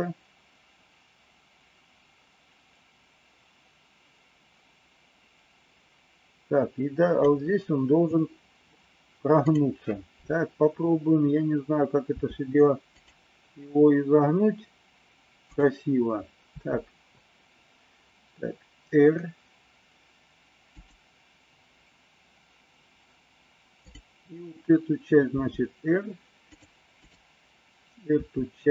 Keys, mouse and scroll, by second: 12.2 r, 15.4 click, 16.5 r, 25.4 r, 27.0 click, 28.0 r.